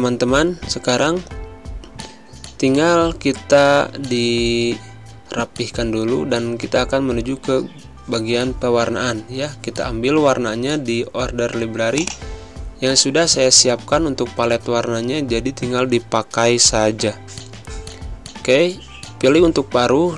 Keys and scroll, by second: 0.0 space, 4.5 alt+d, 4.7 alt+p, 5.5 z, 17.6 space.